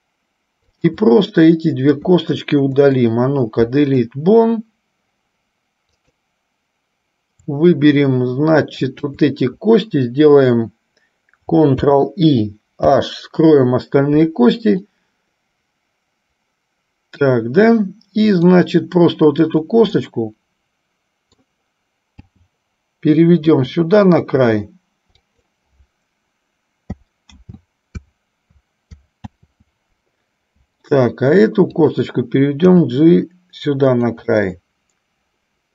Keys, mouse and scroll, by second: 0.8 shift+click, 2.9 Delete, 5.9-6.9 drag, 9.2 shift+click, 11.9 ctrl+i, 13.3 h, 15.0-17.5 middle drag, 18.5 click, 20.3-21.8 middle drag, 24.8 h, 25.5 click, 34.0 g, 34.4-35.7 middle drag.